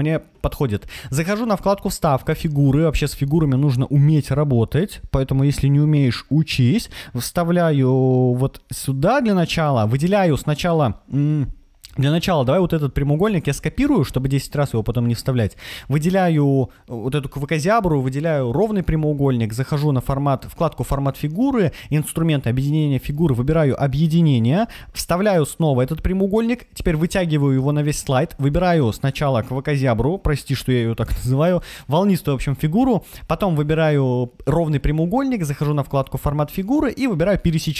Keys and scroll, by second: 13.1 super+c, 24.4 super+v.